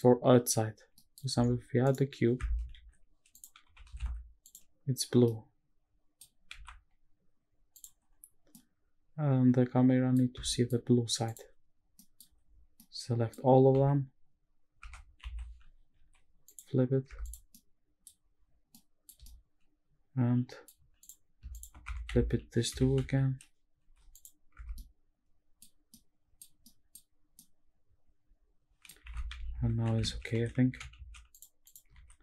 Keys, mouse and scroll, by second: 0.8-1.8 scroll down 4, 0.9 middle drag, 1.8 right click, 2.7 shift+a, 3.6 g, 4.1 shift+z, 4.4 click, 5.2-6.2 middle drag, 6.5 x, 8.1-8.6 scroll up 4, 8.5-10.1 middle drag, 10.5 shift+middle click, 11.3 click, 11.8 scroll down 1, 11.9 middle drag, 12.4 scroll down 3, 12.7-13.3 middle drag, 13.5 scroll up 2, 13.7 a, 14.8 Tab, 15.2 a, 15.9 alt+n, 17.1 Tab, 17.2 click, 17.5 scroll down 1, 17.5-18.0 middle drag, 18.0-18.7 scroll up 3, 18.7-19.1 middle drag, 19.2-20.6 shift+middle drag, 21.0 click, 21.5 shift+click, 21.9 Tab, 22.1 a, 22.1 s, 22.7 Escape, 22.9 a, 23.8 alt+n, 24.5 Tab, 24.7 middle click, 25.9 middle click, 26.6 middle click, 27.4-28.9 middle drag, 29.1 shift+`, 31.6 click, 32.0 ctrl+s.